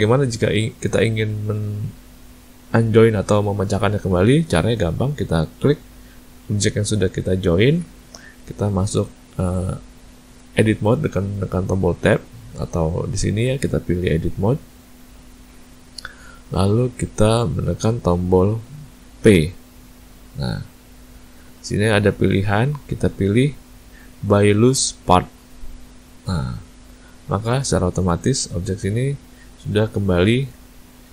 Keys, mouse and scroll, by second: 4.2 ctrl+middle click, 4.6 ctrl+middle click, 5.6 click, 12.0 Tab, 13.9 click, 19.2 p, 27.0 Tab, 27.9 click, 28.4 click, 29.6 click, 30.4 ctrl+z.